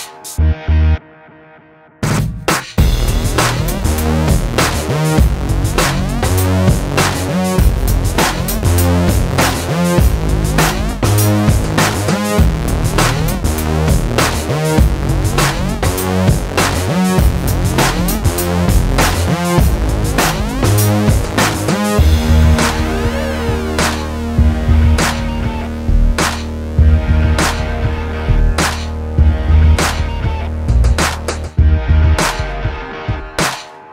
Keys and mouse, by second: 0.2 alt+s, 0.7 Tab, 1.0 Tab, 1.4 KP_7, 1.8 KP_1, 2.2 ctrl+s, 2.8 Tab, 3.2-4.2 middle drag, 4.4 Tab, 6.9 KP_3, 7.5 ctrl+KP_3, 8.4 KP_3, 9.5 ctrl+KP_3, 9.8 KP_7, 11.2 Tab, 11.4 Tab, 11.7 Tab, 12.0 Tab, 12.2 ctrl+s, 12.9 KP_0, 15.5 Escape, 16.5 ctrl+i, 16.7 h, 17.0 Tab, 17.7 a, 18.0 ctrl+z, 20.2 ctrl+r, 21.5 click, 21.9 middle click, 22.0 click, 22.3 middle click, 22.5 click, 23.3 middle click, 23.6 ctrl+b, 25.0 middle click, 25.4 ctrl+KP_Subtract, 26.0 alt+s, 27.0 ctrl+b, 27.6 alt+s, 28.9 Tab, 29.5 Tab, 29.7 ctrl+z, 30.0 ctrl+z, 30.2 ctrl+z, 30.9 alt+s, 31.3 ctrl+b, 32.4 ctrl+KP_Subtract, 32.7 alt+s, 33.8 ctrl+b.